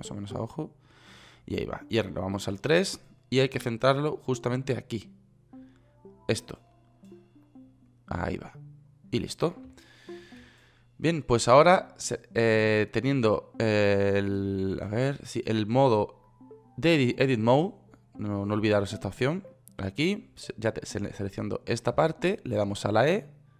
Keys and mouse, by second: 2.9 KP_3.